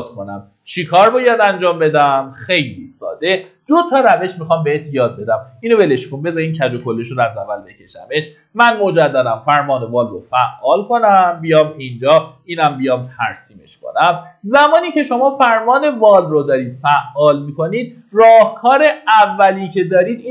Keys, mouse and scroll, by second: 6.0 Delete, 6.8-8.4 typing, 6.8 middle click, 8.9 click, 12.8 Escape, 15.0-16.0 typing, 18.4 click.